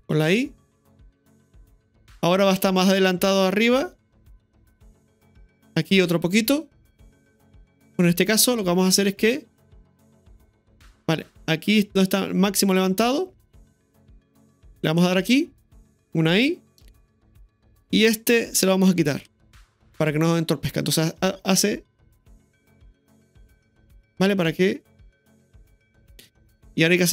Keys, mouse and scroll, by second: 1.1 r, 2.6-5.7 drag, 9.8-13.6 drag, 14.9 r, 16.5 i, 17.8-19.2 right drag, 19.2 Delete, 20.9 click, 21.1 space, 26.6-27.1 drag.